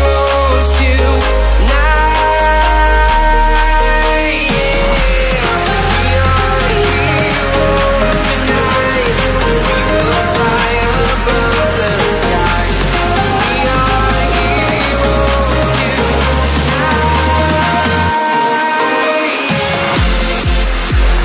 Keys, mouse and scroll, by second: 0.0 Up, 0.3 click, 0.4 double click, 0.6-0.9 alt+scroll down 2, 0.9 space, 1.0 click, 1.1 space, 1.2 click, 2.2 click, 3.3-3.7 alt+scroll up 2, 3.7 space, 3.7 click, 3.8 space, 4.2 alt+click, 7.6 click, 8.1 alt+scroll up 2, 8.3 click, 8.8 alt+scroll down 2, 9.0 space, 9.1 click, 10.4 scroll up 1, 10.6 space, 10.6 click, 14.2 click, 15.8 click, 17.5 double click, 17.7 click, 18.3 click, 19.7 click, 20.9 double click.